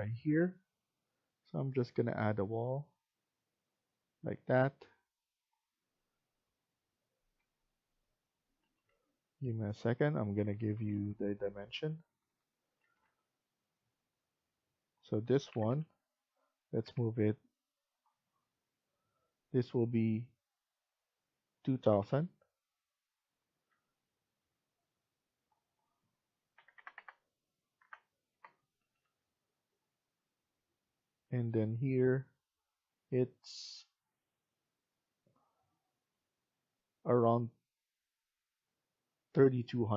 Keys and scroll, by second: 8.5 Escape, 8.7 Escape, 10.3 Right, 10.5 Right, 10.6 Right, 10.8 Right, 11.1 Right, 11.3 Right, 11.5 Right, 11.6 Right, 11.8 Right, 12.1 Right, 12.7 Escape, 12.7 Right, 12.9 Escape, 16.7 Up, 21.9 Down, 23.5 Escape, 26.2-27.1 typing, 28.2 Return, 28.9 Escape, 39.5 Escape, 39.8 Escape.